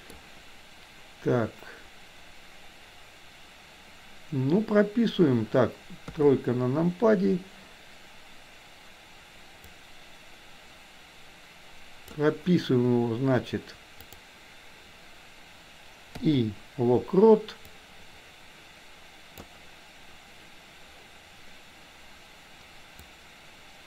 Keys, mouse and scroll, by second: 6.2 KP_3, 9.8-12.3 drag, 14.1 click, 17.8-19.6 drag, 22.9-23.8 drag.